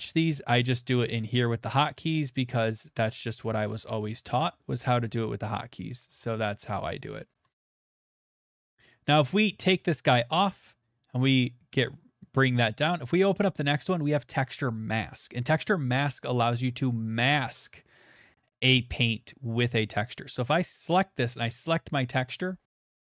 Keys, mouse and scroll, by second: 1.2 right click, 1.8 ctrl+right click, 2.3 ctrl+right click, 2.7 ctrl+right click, 3.2 shift+right click, 3.7 shift+right click, 4.2 shift+right click, 5.2 right click, 7.2 alt+right click, 7.7 shift+middle click, 8.0 ctrl+middle click, 8.9 click, 9.2 click, 10.1 click, 10.3 ctrl+right click, 11.4 click, 12.9 click, 13.3 scroll, 20.4 click, 21.7 click.